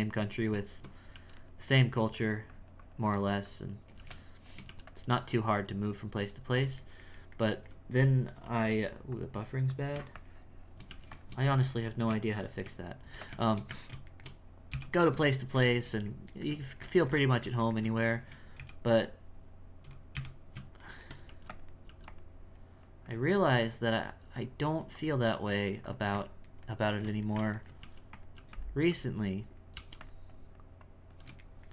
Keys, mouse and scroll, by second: 0.5 Tab, 2.2-4.0 drag, 4.7 f, 5.2-6.9 drag, 6.9-8.4 shift+middle drag, 9.1-10.9 drag, 11.5-12.5 drag, 12.5 shift+middle click, 13.6-14.7 middle drag, 14.7 KP_1, 15.5-18.6 shift+middle drag, 18.6 KP_1, 20.1 KP_1, 21.0 shift+middle click, 21.3 f, 21.9 f, 22.6-26.6 drag, 26.6-27.8 ctrl+middle drag, 27.8 f, 30.3-31.5 drag, 31.5 shift+middle click.